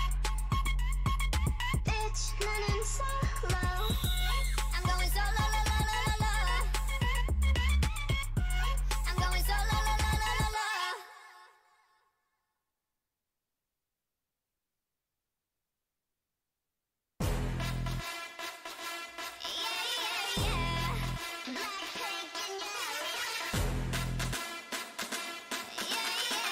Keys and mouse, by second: 0.1 Tab, 0.7 a, 1.6 a, 5.2 ctrl+z, 6.1 ctrl+z, 8.0 z, 9.2 ctrl+e, 10.1 a, 10.2 a, 10.4 u, 12.1 middle click, 13.6 middle click, 15.0 Tab, 15.4 z, 15.7 middle click, 18.2 middle click, 20.0 Tab, 21.7 a, 26.0 z.